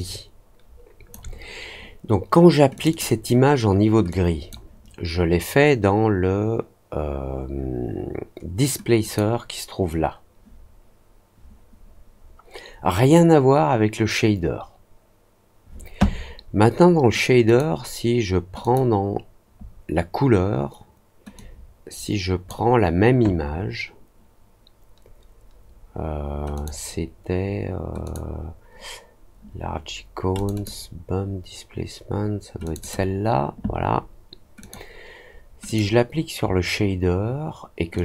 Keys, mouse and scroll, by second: 2.7 click, 2.8 click, 4.0 click, 8.9 click, 17.4 click, 18.5 click, 21.3-22.4 drag, 26.5 click, 28.0 click, 30.3 click, 30.5 click, 32.6 click, 32.7 click, 34.5 click, 35.6 click, 37.9-38.0 drag.